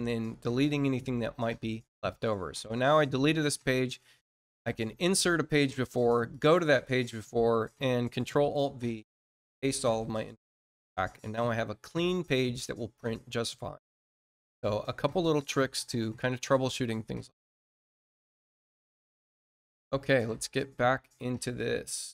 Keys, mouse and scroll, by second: 2.0 click, 4.9 click, 6.2 click, 22.0 alt+click.